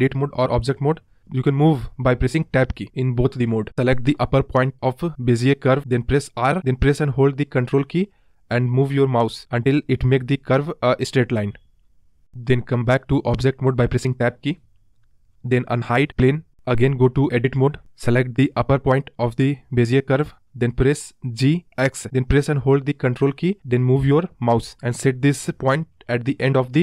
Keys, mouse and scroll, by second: 3.7 scroll up 2, 3.8 r, 9.6-11.7 scroll up 14, 11.7-12.6 scroll up 10, 12.6-16.0 scroll down 21, 16.0 Tab, 17.0-17.4 scroll up 1, 18.1 click, 19.0 Tab, 19.5-20.8 scroll down 2, 20.8-23.0 scroll down 6, 23.0 g.